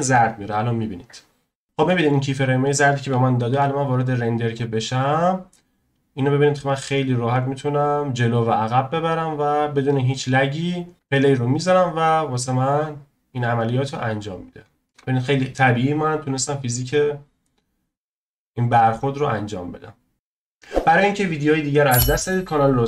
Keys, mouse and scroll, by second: 4.2 z, 4.5 click, 6.6-9.8 drag, 10.3-12.5 drag, 14.3 scroll up 2, 14.8-15.7 middle drag.